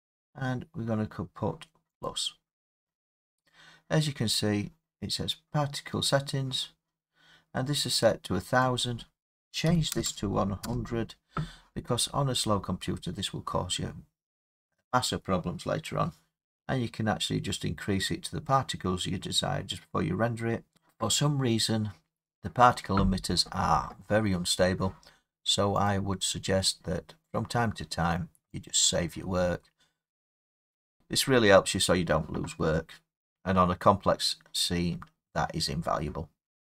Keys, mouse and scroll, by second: 2.0-7.1 drag, 8.8-12.5 drag, 9.6 typing, 10.6 Return, 25.9 click, 28.6 click, 31.0 click.